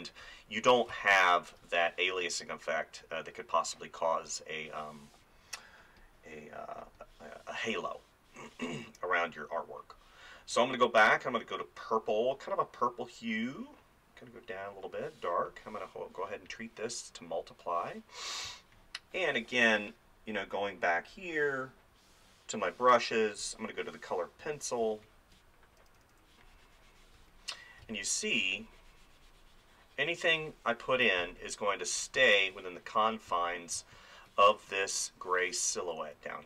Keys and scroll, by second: 0.9 space, 18.5 space, 24.8 space, 27.2 ctrl+z, 27.8 space, 33.3 ctrl+z, 33.8 space.